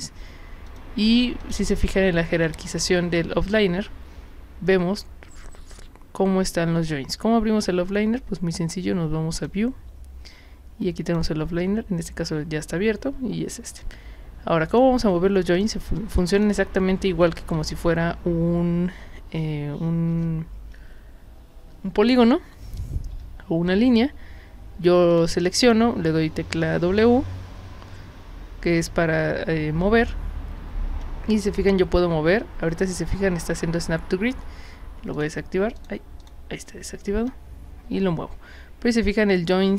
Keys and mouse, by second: 0.7 click, 1.4 click, 2.4 click, 9.4 click, 11.1 click, 14.7 click, 15.6 drag, 16.3 click, 23.1 w, 25.1 click, 25.6 click, 26.8 w, 35.2 click, 35.8 click, 36.2 drag.